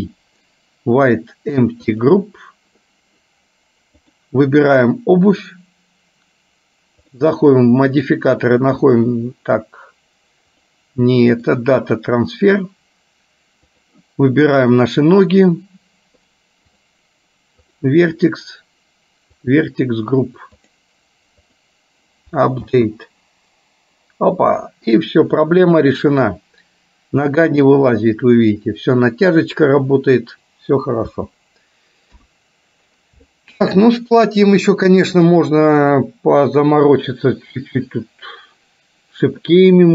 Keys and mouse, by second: 4.1 click, 7.1 click, 8.1-9.2 drag, 10.6 click, 11.7-12.8 drag, 16.8 click, 17.8 click, 18.2 click, 19.7 click, 20.8-21.8 drag, 22.8 space, 24.8-28.0 middle drag, 31.2 space, 32.2 KP_1, 33.3 shift+middle click, 36.1 middle click, 39.6-39.9 middle drag.